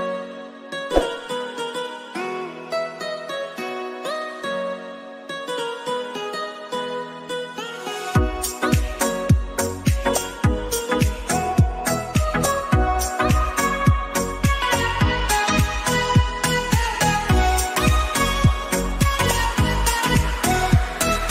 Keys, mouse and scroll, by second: 3.2 click, 5.5-9.9 scroll down 1, 9.9 click, 12.9 ctrl+c, 13.3 ctrl+f, 14.9-21.3 alt+drag.